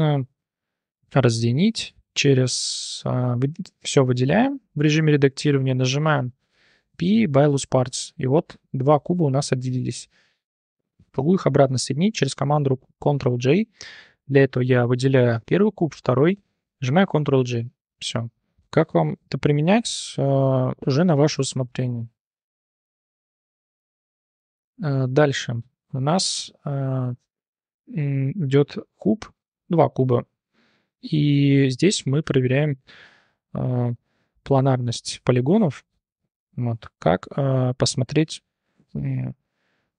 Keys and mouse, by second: 2.8 click, 3.5 a, 6.5 p, 7.9 Tab, 8.2-9.0 drag, 10.9 shift+click, 11.3 click, 14.4 click, 16.9 ctrl+j, 19.9-20.2 drag, 21.8-22.1 shift+drag, 23.0 h, 23.5 drag, 23.6 h, 23.8 click, 24.0 h, 24.1 click, 24.3 h, 25.2 shift+click, 26.2-26.6 drag, 27.0 click, 27.3 shift+click, 28.4 click, 29.4 click, 30.4-30.8 drag, 32.0-32.3 drag, 34.9 click, 35.3 click.